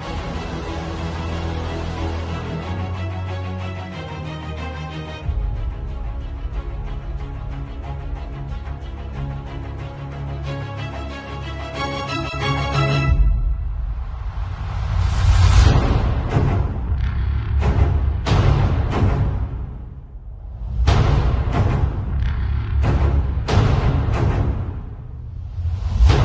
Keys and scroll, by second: 1.6 space, 2.4 z, 3.0 v, 3.1 space, 5.4 shift+super+g, 6.3-7.3 typing, 7.5 Return, 11.5 alt+shift+super+z, 12.0 alt+shift+super+z, 16.6 super+t.